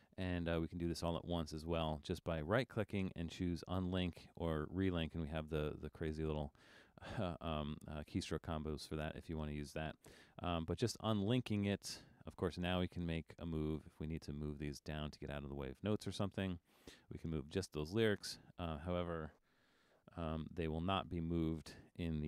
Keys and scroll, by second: 20.5 alt+super+..